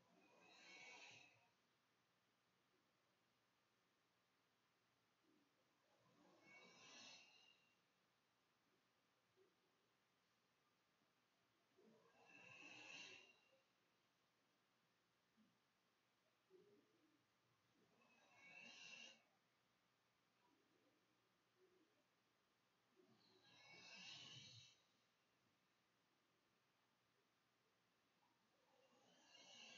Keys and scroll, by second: 4.4 -, 4.5 =, 4.8 \, 5.0 Delete, 5.6 Delete, 6.4 Return, 7.4-10.8 typing, 10.4 Return, 10.6 Delete, 11.4 Delete, 11.5 Return, 12.2-15.2 typing, 16.3 Right, 17.2 Return, 18.2 Delete, 18.9 Delete, 19.5 Return, 20.5-21.5 typing.